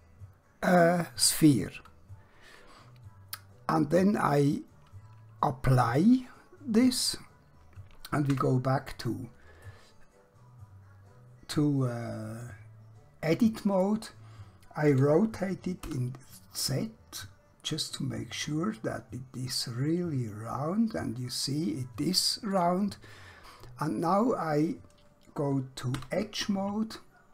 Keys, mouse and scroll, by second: 6.7 click, 8.3 Tab, 9.7 middle click, 14.9 r, 15.8 z, 22.7 click, 23.6 scroll up 1, 24.9 scroll down 1, 26.1 2.